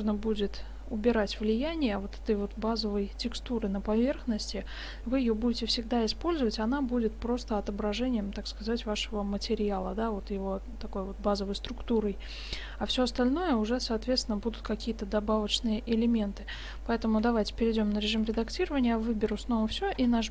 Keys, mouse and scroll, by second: 13.4-15.5 middle drag, 16.7 shift+z, 17.3 Tab, 18.2 a, 18.4 a, 20.0 u.